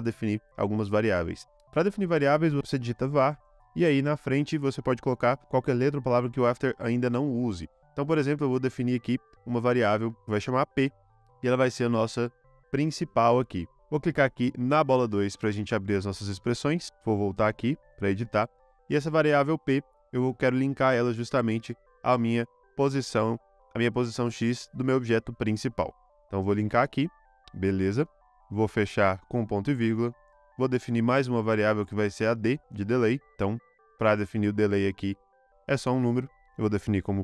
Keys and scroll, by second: 1.5-3.5 typing, 10.4 p, 16.5 u, 28.1 ;, 29.3 ;, 30.2 Return, 30.9-33.0 typing, 36.4-37.2 typing.